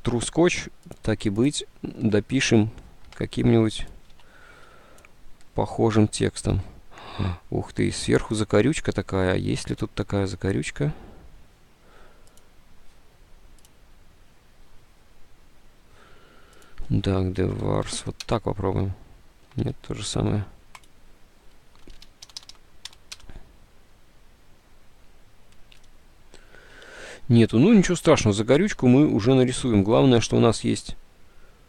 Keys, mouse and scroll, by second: 4.4 alt+Tab, 8.6 alt+Tab, 17.6 BackSpace, 18.0 s, 18.3 Return, 19.0 BackSpace, 21.9-23.2 typing, 23.2 Return, 27.0 alt+Tab, 28.9 alt+Tab, 30.5 alt+Tab.